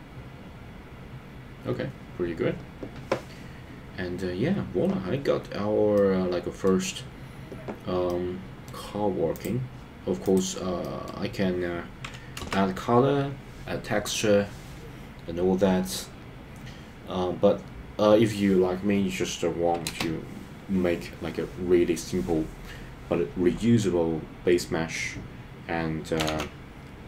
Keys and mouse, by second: 5.9 middle click, 8.1 middle click, 10.8 middle click, 12.4 KP_0, 20.0 space, 26.5 ctrl+s.